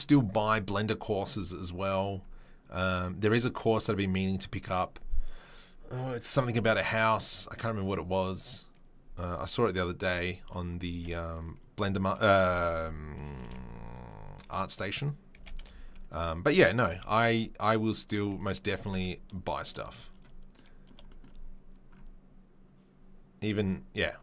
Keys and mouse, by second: 8.8-10.1 right drag, 10.1-24.2 middle drag, 10.9 s, 13.4 g, 14.3 s, 15.3 g, 18.2 s, 18.7 g, 19.8 z.